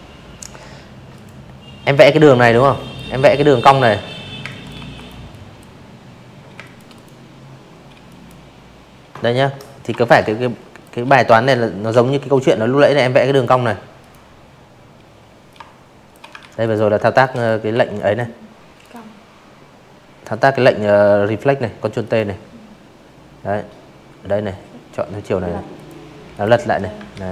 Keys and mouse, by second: 0.6 click, 1.4 space, 1.5 click, 1.7 v, 1.9 click, 2.2 drag, 3.5 space, 3.6 click, 3.9 click, 5.0 drag, 6.8 alt+shift+click, 8.9 ctrl+t, 10.3 click, 11.0 click, 12.5 shift+click, 13.4 ctrl+z, 13.6 click, 14.2 click, 14.7 Delete, 14.9 drag, 15.8 right click, 19.0 click, 22.7 click, 23.3 click, 24.1 ctrl+z, 25.3 alt+shift+click, 26.4 right click.